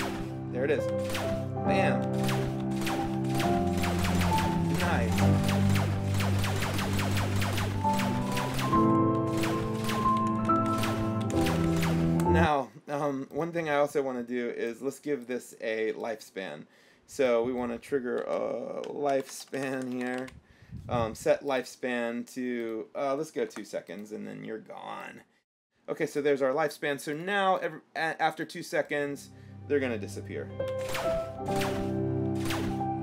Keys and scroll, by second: 0.0 l, 1.1 l, 2.3-11.8 typing, 5.9 Down, 7.8 Left, 8.4 Up, 9.1 Right, 10.0 Up, 10.4 Left, 12.4 Escape, 18.4-20.9 typing, 23.7 KP_2, 30.9-32.5 typing.